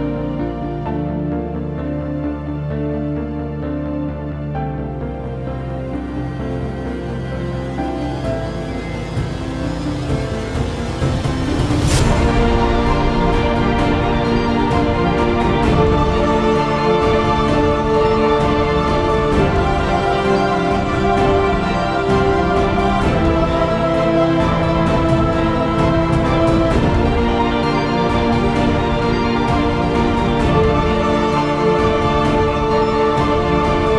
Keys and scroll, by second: 3.8-6.6 typing, 6.6 Return, 15.2-19.1 typing, 16.6 Return, 21.9-22.6 typing, 25.2-27.0 typing.